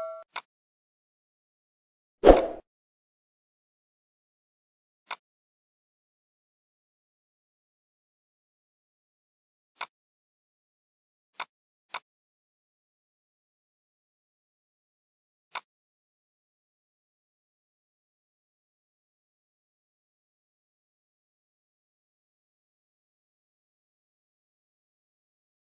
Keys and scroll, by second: 7.0 ctrl+a, 8.9 ctrl+g, 24.9 ctrl+r.